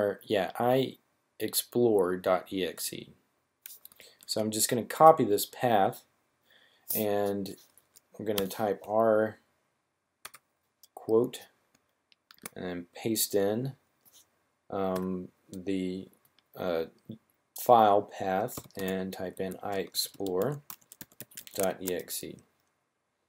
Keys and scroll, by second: 4.1 super+c, 8.3 r, 10.0 ", 12.3 super+v, 14.8 typing, 18.1-21.5 typing.